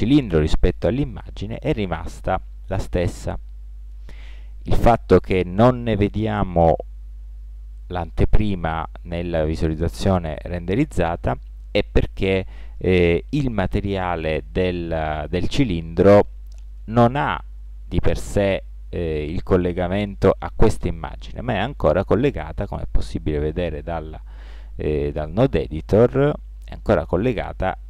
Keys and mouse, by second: 6.6 middle click, 8.2 click, 8.4 middle click, 8.6-9.8 middle drag, 9.9 click, 22.6-23.4 drag.